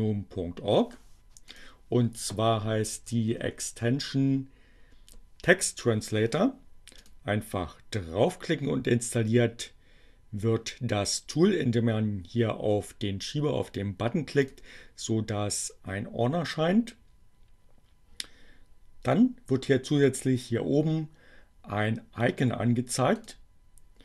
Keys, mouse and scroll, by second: 0.4-1.7 drag, 2.4 e, 7.1 click, 14.2 click, 22.7 click.